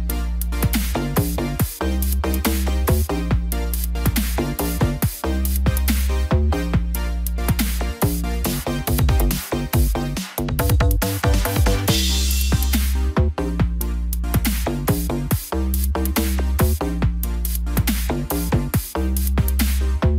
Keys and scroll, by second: 3.0 ctrl+j, 3.7 ctrl+t, 12.0 ctrl+g, 16.0 ctrl+j.